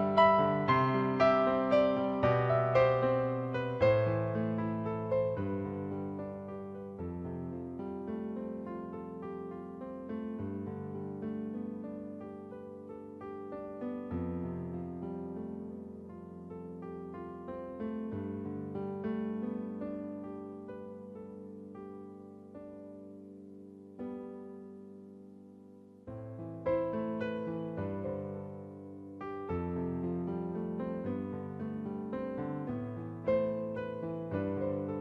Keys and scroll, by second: 0.5 b, 7.9-9.2 typing, 29.1 shift+F6, 31.9 2, 32.3 5, 34.3 shift+F6.